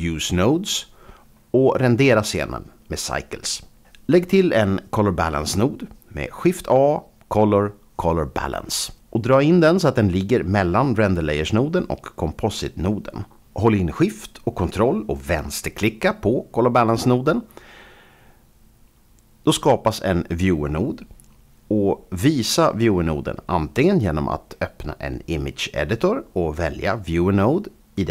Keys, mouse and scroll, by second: 0.2 scroll up 2, 0.5-1.0 scroll down 1, 1.7 click, 1.8 click, 2.0 scroll down 1, 4.0 click, 6.7 shift+a, 8.3 click, 9.5 click, 11.0 Home, 20.7 ctrl+shift+click.